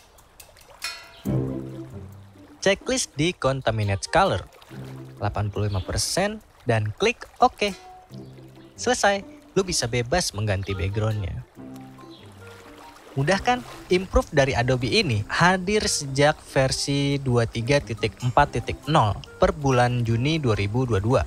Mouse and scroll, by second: 8.7 click, 9.3 click, 13.9 click, 17.9-19.3 drag.